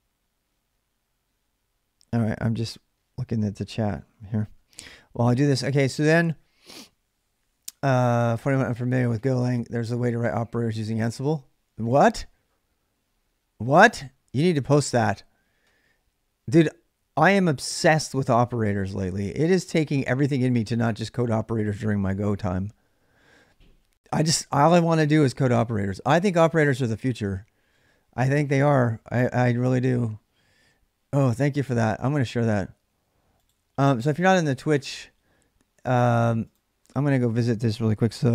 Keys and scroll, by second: 37.6 ctrl+a, 38.2-38.3 typing.